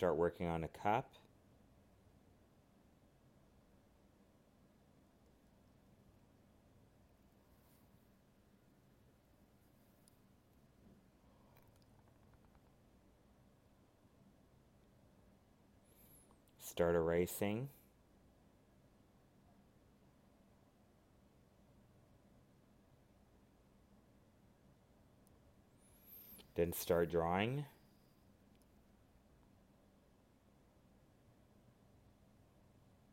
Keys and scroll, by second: 0.0 alt+space, 3.0 alt+space, 9.8 ctrl+z, 21.8 alt+space, 23.9 ctrl+z, 26.2 alt+space, 29.3 alt+space, 31.4 alt+space.